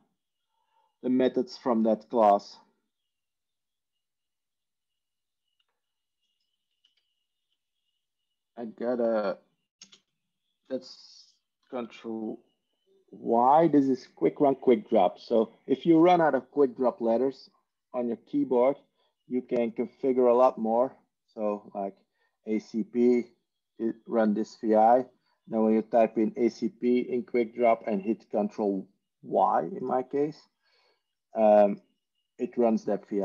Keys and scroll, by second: 10.0 ctrl+space, 11.5 ctrl+y.